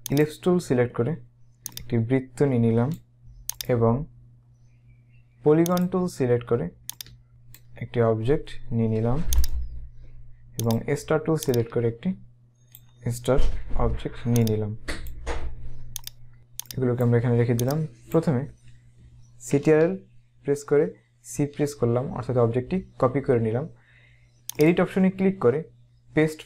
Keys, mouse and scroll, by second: 0.2 click, 1.7 click, 3.7 right click, 5.9 click, 6.9 click, 9.5 right click, 10.8 click, 14.4 click, 21.2 ctrl+c, 24.7 click.